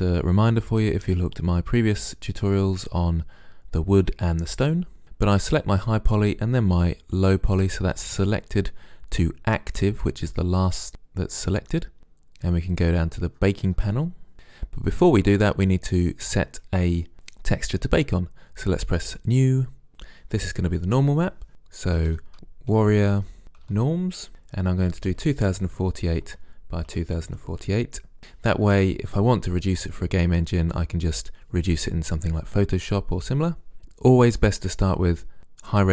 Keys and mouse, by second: 5.5-9.1 drag, 12.8-16.3 middle drag, 19.3-20.8 middle drag.